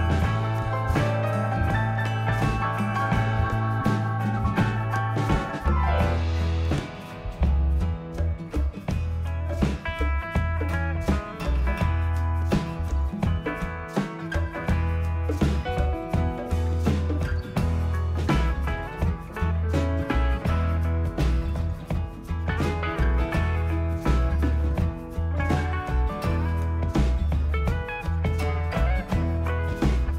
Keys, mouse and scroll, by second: 3.4 s, 5.1 click, 6.0 click, 7.1 click, 8.2 click, 9.9 click, 10.6 click, 12.8 click, 16.1 click, 17.1-17.4 typing, 21.6 typing, 23.7 click, 27.4 click.